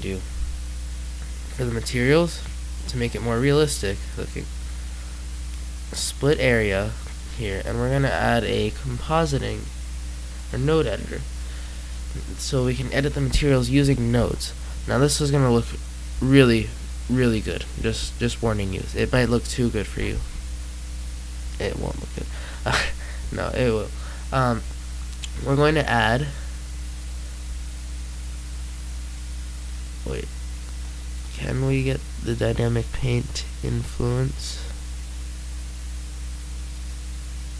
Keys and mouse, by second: 0.0 Escape, 11.2-12.2 middle drag.